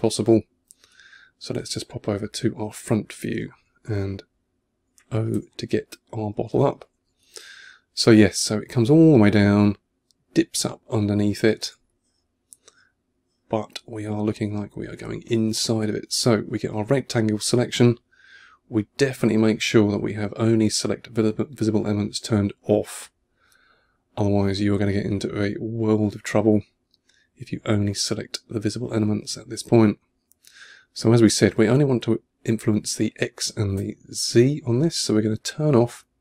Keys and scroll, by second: 4.2 o, 5.6 1, 6.9 2, 10.8 2, 11.7 1.